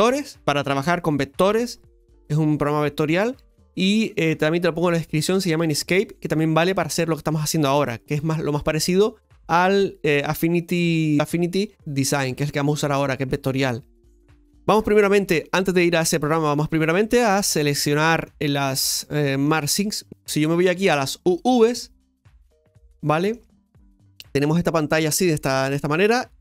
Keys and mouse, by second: 17.7 middle click, 18.6 middle click, 21.4 click, 22.6-24.6 shift+middle drag.